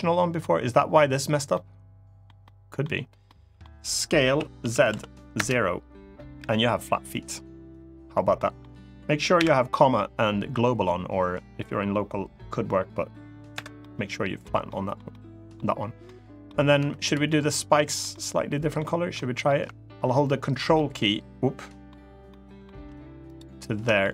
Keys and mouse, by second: 1.3 middle click, 2.2 middle click, 3.0 middle click, 4.0 s, 4.3 z, 4.6 0, 5.1 Return, 6.1 KP_3, 8.1 middle click, 9.1 ,, 13.5 middle click, 14.4 middle click, 14.8 middle click, 15.8 middle click, 16.5 3, 16.8 click, 17.0 middle click, 17.8 middle click, 18.9 middle click, 20.5-21.6 ctrl+shift+middle drag, 22.0 ctrl+shift+middle click, 23.7 middle click.